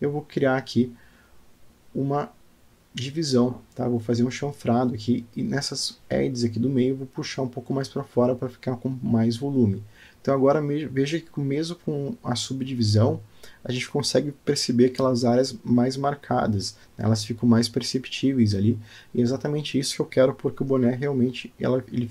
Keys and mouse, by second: 0.1 middle click, 1.8 ctrl+b, 6.6 Tab, 6.9 middle click, 8.1 click, 10.0 g, 12.4 click, 12.7 g, 14.7 click, 15.3 shift+v, 16.9-18.9 middle drag, 19.2 Tab, 19.9 click, 20.4-22.1 middle drag.